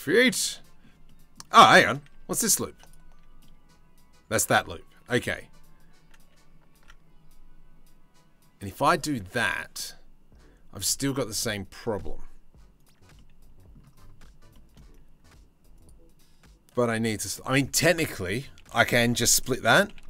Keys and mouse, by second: 0.2 shift+middle click, 6.4 ctrl+r, 12.8 middle click, 14.0-18.2 shift+middle drag, 18.2 1, 19.5 g.